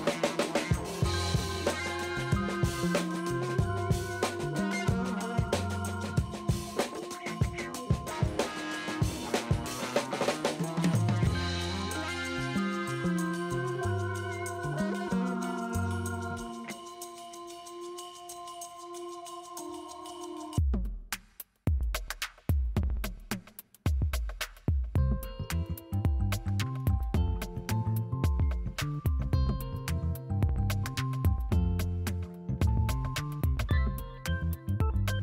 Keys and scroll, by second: 0.0-0.8 typing, 4.1 ctrl+alt+z, 5.7 space, 6.3 b, 7.2 [, 8.1 ], 9.6 7, 10.8 [, 11.1 3, 12.5 space, 14.1 ctrl+space, 17.4 space, 18.0 ], 20.2 shift+space, 20.7 space, 21.1 r, 24.0-25.4 typing, 27.8 space, 28.6 b, 28.9 ], 29.5 3, 31.6 b, 32.2 [, 34.2 r, 34.8 ].